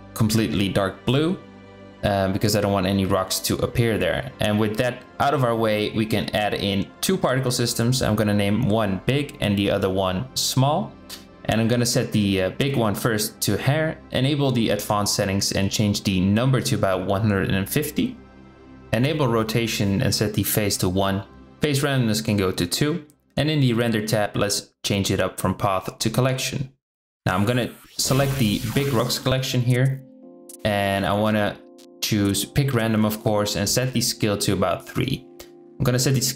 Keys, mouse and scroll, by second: 0.4 KP_7, 1.4-2.5 drag, 3.3 Tab, 6.4-6.7 drag, 7.3 click, 8.3-9.9 drag, 10.2 click, 12.7 click, 13.7 click, 15.4-16.7 drag, 18.6 drag, 20.0 click, 21.3 click, 23.9-25.6 drag, 28.0-30.0 drag, 32.0 click, 32.8-34.4 drag, 35.1-36.3 drag.